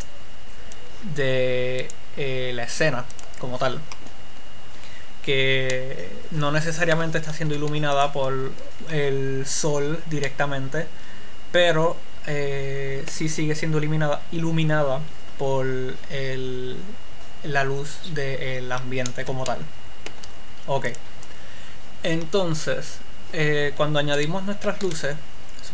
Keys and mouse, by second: 6.1-8.1 drag, 7.8 x, 10.6 click, 24.6-25.7 right drag, 25.1 shift+a.